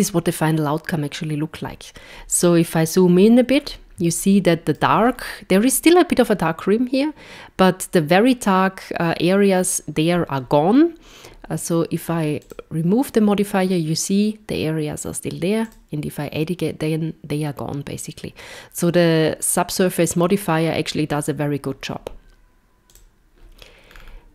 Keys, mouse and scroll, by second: 2.1 scroll up 2, 3.6 scroll up 1, 4.2 shift+middle click, 5.2 scroll up 1, 12.5 click, 15.8 click, 22.9 click, 23.9 scroll down 4.